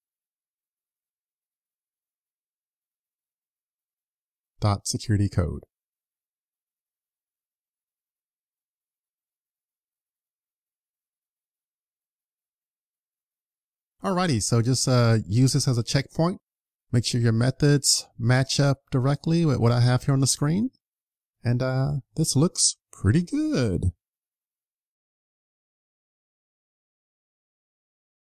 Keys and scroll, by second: 7.0 super+s.